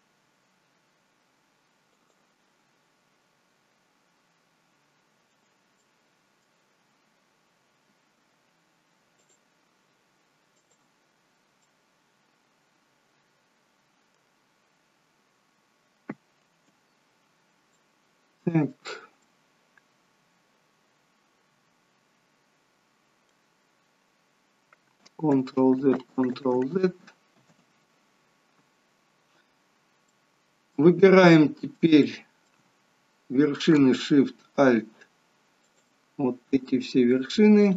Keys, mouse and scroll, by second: 5.7 middle click, 8.1 k, 11.6 middle click, 17.3-17.6 scroll down 3, 17.6 middle click, 19.2 middle click, 25.3 ctrl+z, 25.7 ctrl+z, 26.1 ctrl+z, 26.5 ctrl+z, 27.5 ctrl+z, 29.5 scroll down 2, 30.0 middle click, 31.3 middle click, 32.0 shift+middle click, 35.6 alt+shift+click, 37.6 click.